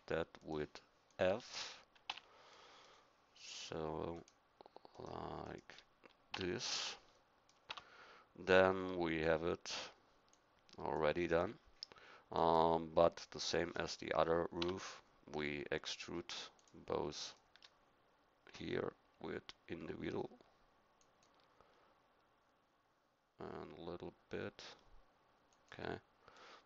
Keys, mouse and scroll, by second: 2.1 f, 2.5 middle click, 6.3 f, 7.7 Tab, 11.6 middle click, 14.6 Tab.